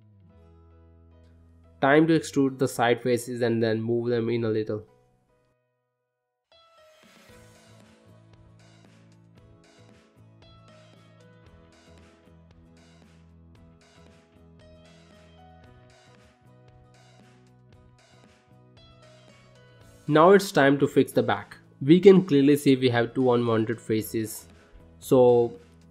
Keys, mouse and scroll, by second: 0.0 shift+middle click, 0.3 middle click, 0.7 shift+middle click, 1.1 click, 1.4 shift+click, 1.8 click, 2.1 middle click, 2.8 e, 6.1 g, 9.2 middle click, 9.7 scroll down 2, 9.9 middle click, 10.3-10.7 scroll up 2, 11.0 click, 11.3 scroll down 1, 11.7 middle click, 12.8 middle click, 13.5 shift+middle click, 14.0 middle click, 14.4 shift+middle click, 15.6 middle click, 16.2-16.5 scroll up 1, 16.5 middle click, 16.9 scroll down 1, 17.2 middle click, 19.2 shift+middle click, 19.8 ctrl+middle click, 20.6 middle click, 21.3 shift+middle click, 22.0 middle click, 22.4 ctrl+middle click, 23.0 shift+middle click, 23.4 middle click, 24.8 middle click.